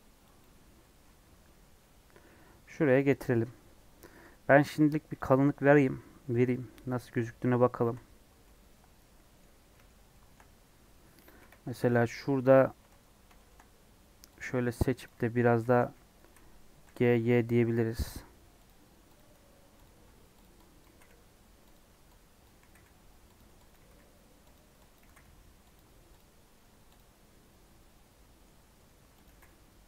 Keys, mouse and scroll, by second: 0.7 middle click, 1.0 Tab, 1.5 middle click, 2.4 Tab, 2.9 click, 3.6 Tab, 5.1-8.1 shift+drag, 8.1 scroll down 2, 8.3-9.3 middle drag, 9.3 scroll up 4, 9.6 middle click, 10.2-10.6 scroll down 4, 11.1 scroll down 1, 11.3 KP_2, 12.8 Tab, 12.9 scroll up 6, 13.3 shift+middle click, 13.6-14.2 scroll down 2, 14.7 scroll down 1, 15.0 click, 15.6 g, 16.2 g, 19.1 click, 19.8 shift+click, 20.3 click, 20.7 click, 20.8 g, 22.3 click, 22.6 g, 23.6 click, 24.9 click, 24.9 g, 26.1 click, 26.4 Tab, 27.0 scroll down 1, 27.2-28.5 middle drag, 28.5 Tab, 28.6 scroll up 1, 28.7 middle click, 29.2 click.